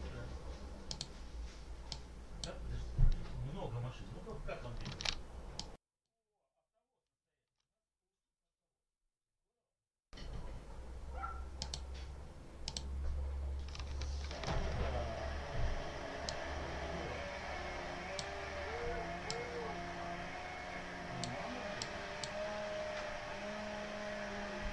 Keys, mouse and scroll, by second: 0.8 click, 1.8 click, 5.4 click, 7.4 ctrl+z, 11.5 click, 12.6 click, 14.2 alt+5, 16.2-18.2 drag, 19.2-21.3 drag, 21.7 click.